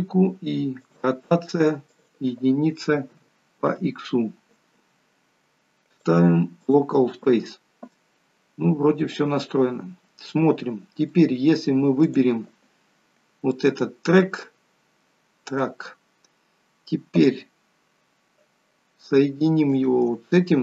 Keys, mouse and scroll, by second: 1.0 click, 1.0-2.0 scroll down 2, 2.0 click, 5.0 scroll down 1, 5.9 click, 5.9-8.1 scroll down 2, 8.6-9.6 scroll up 3, 9.8 scroll up 2, 9.9 scroll down 1, 11.2 middle click, 12.1 click, 13.6 middle click, 19.8 shift+click.